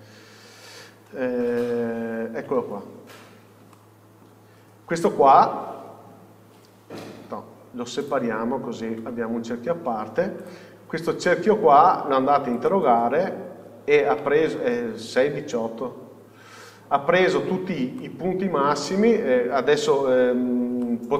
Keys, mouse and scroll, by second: 0.0-2.0 scroll down 1, 2.0 alt+h, 2.9 scroll down 1, 3.9 alt+middle click, 9.2 Tab, 10.7 click, 11.2 scroll up 1, 12.9 click, 17.3 scroll down 1, 18.2-21.1 middle drag.